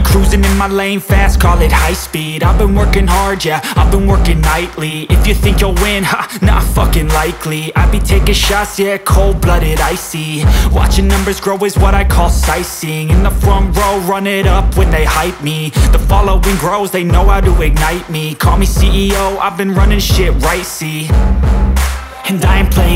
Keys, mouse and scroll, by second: 8.4 ctrl+super+z.